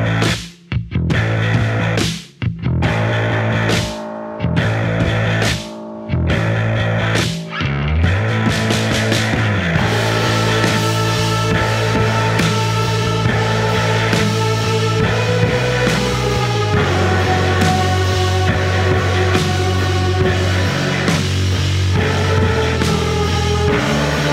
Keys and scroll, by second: 1.8 5.